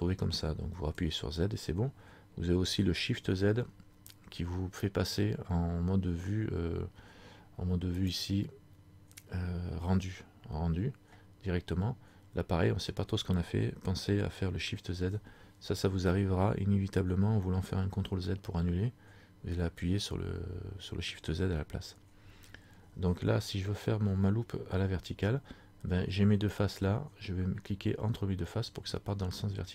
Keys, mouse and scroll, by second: 0.9 z, 3.5 shift+z, 6.7 scroll down 1, 8.3 click, 15.1 shift+z.